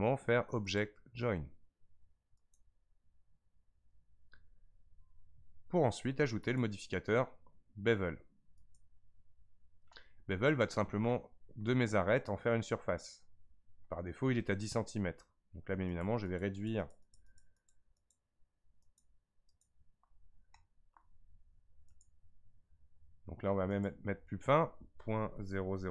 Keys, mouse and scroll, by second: 0.7-3.8 drag, 6.4 click, 8.7-9.5 drag, 10.6-11.3 shift+middle drag, 11.3 scroll up 4, 13.6-13.9 scroll up 1, 15.9-20.6 drag, 20.6-21.9 shift+middle drag, 21.9-25.9 drag.